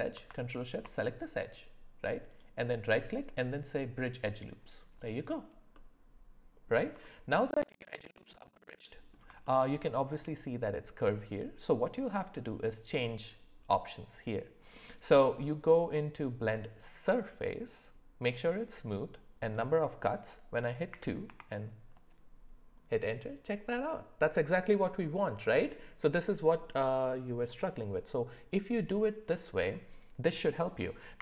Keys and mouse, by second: 0.6 alt+shift+click, 2.3-4.3 right drag, 5.7 middle click, 7.0 shift+middle click, 8.3 middle click, 9.4 shift+middle click, 14.6-16.5 drag, 19.4-21.4 drag, 29.9-31.2 drag.